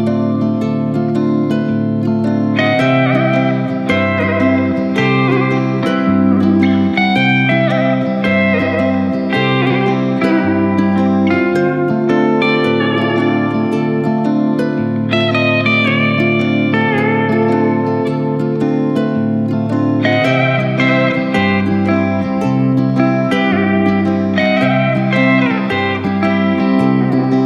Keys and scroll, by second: 2.5 ctrl+z, 2.6 ctrl+z, 4.4 ctrl+shift+KP_Subtract, 13.5 Delete, 19.7 ctrl+s, 25.8 ctrl+z.